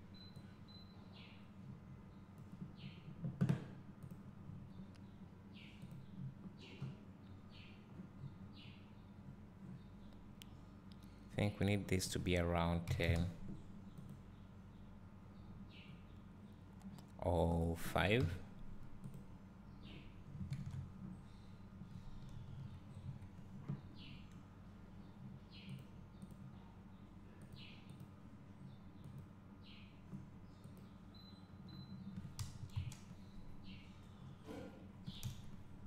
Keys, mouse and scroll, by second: 5.8 scroll up 1, 6.0 click, 8.4-9.9 scroll down 1, 9.9-13.6 scroll up 1, 14.3 click, 19.3 click, 22.5 KP_0, 26.0-28.0 drag, 32.8 KP_0, 34.2 scroll down 1, 35.2 KP_0.